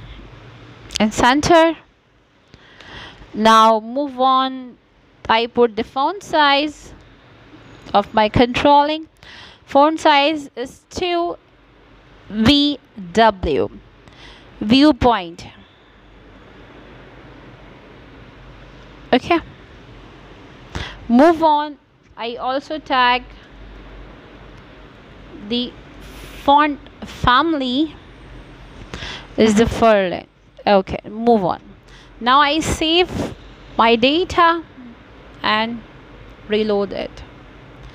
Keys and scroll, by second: 6.1 w, 13.2-15.4 typing.